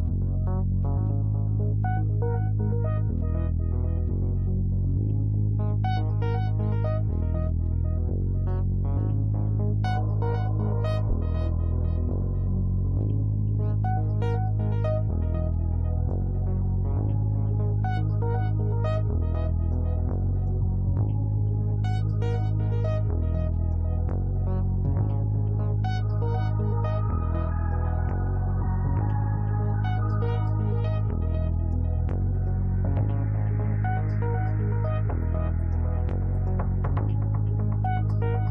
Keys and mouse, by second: 3.4-5.7 drag, 7.4-10.7 drag, 12.0-14.8 drag, 19.1 click, 21.5 click, 24.8 click, 27.9 click, 28.0 right click, 28.2 click, 28.2 right click, 28.5 click, 28.6 right click, 28.9-31.9 middle drag, 31.9 click, 32.6 click, 33.3 click, 34.5 click, 35.8 shift+a.